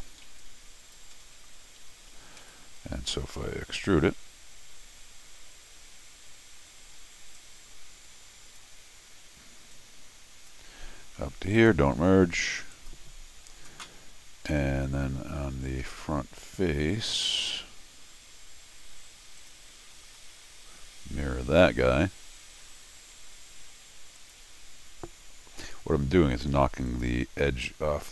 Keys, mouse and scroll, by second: 0.0 middle click, 0.3 t, 0.4 click, 1.1 Escape, 1.2-1.7 scroll down 6, 1.9 Escape, 2.4 x, 7.4-8.6 drag, 9.7 click, 11.6 click, 12.7 click, 14.5 Escape, 15.8-16.5 scroll down 4, 19.4 click, 20.2 scroll down 1, 24.2 click, 26.9 click.